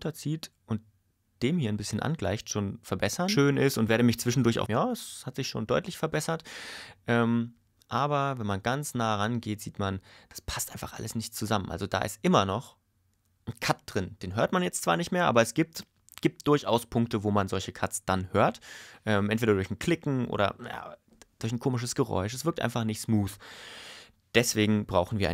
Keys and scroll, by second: 3.2 space, 4.6 space, 5.7 ⟲.